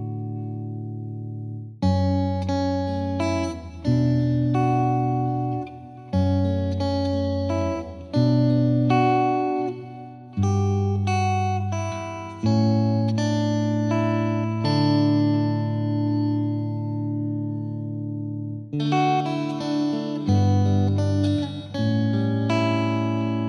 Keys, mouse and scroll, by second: 0.3 n, 1.5 shift+middle click, 2.2 space, 3.4-5.0 middle drag, 5.0 space, 5.3-6.0 scroll up 1, 6.0-7.3 shift+middle drag, 7.3-8.4 drag, 8.4-9.9 shift+middle drag, 10.0 scroll up 1, 10.3-10.6 scroll down 1, 10.6-11.8 shift+middle drag, 11.8-12.7 scroll down 2, 12.7-14.4 drag, 14.4 ctrl+s, 15.5 click, 16.3 ctrl+s, 16.6 middle drag, 16.8-17.3 scroll down 3, 17.3 Right, 17.6 KP_0, 17.9 scroll up 1, 18.1 scroll down 1, 18.4-18.9 scroll up 1, 18.9-21.9 drag, 21.9 ctrl+z, 22.1-23.4 right drag.